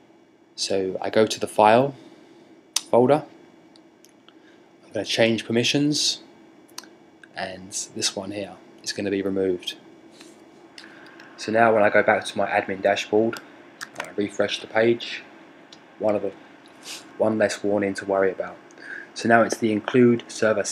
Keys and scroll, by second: 13.2 super+r.